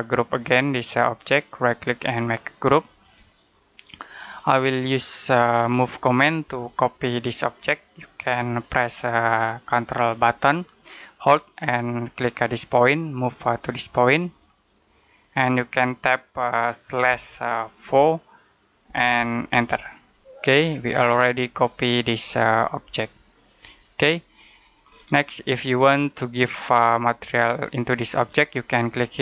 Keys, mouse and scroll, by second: 1.0 right click, 2.5 click, 3.1 middle click, 4.3-6.3 scroll down 1, 6.3 click, 12.4 click, 14.6 click, 16.9-17.8 typing, 19.4 Return, 20.7 middle click, 24.7-25.9 scroll down 1, 25.9 middle click.